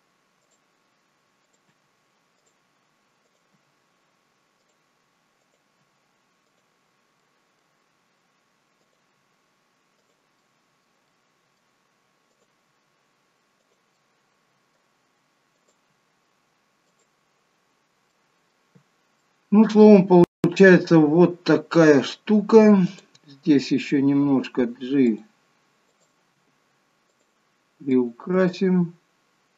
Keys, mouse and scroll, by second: 1.5 click, 1.7 g, 3.3 click, 3.6 g, 5.5 click, 5.9 g, 7.3 middle click, 8.9 click, 9.3 g, 10.4 middle click, 11.2 middle click, 12.3 click, 12.8 g, 14.0 middle click, 15.7 click, 16.0 g, 17.3-17.9 scroll down 5, 18.3 middle click, 18.9 scroll down 2, 19.2 middle click, 20.2-21.5 scroll up 5, 21.5-21.9 scroll down 1, 22.8 click, 24.1 g, 25.8 click, 26.5 g, 27.8 click, 28.2 g.